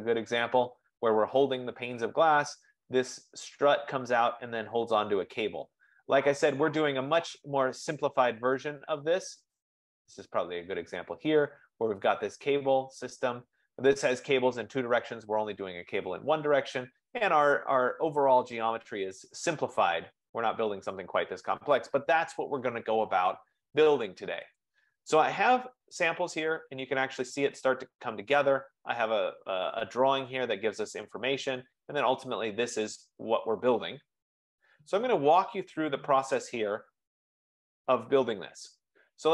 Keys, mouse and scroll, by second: 9.8 click, 12.4 F15, 25.2 click, 26.3-26.7 scroll down 4, 27.1-29.5 scroll down 10, 31.4-31.7 scroll up 4, 31.7-32.4 scroll, 36.8-37.7 scroll, 37.7-38.7 scroll.